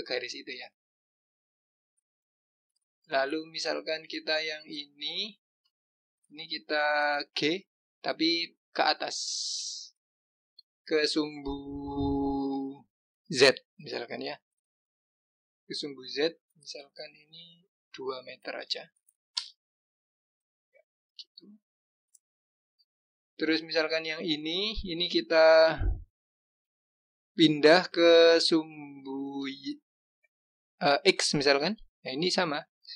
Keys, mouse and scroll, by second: 1.0 click, 5.4 click, 5.9-7.5 scroll down 1, 7.5 g, 21.6 click, 24.3 click, 27.2 g.